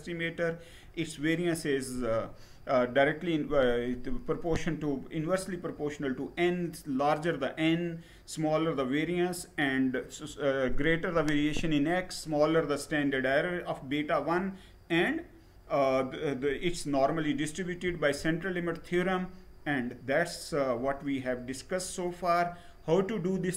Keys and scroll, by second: 17.5 Down.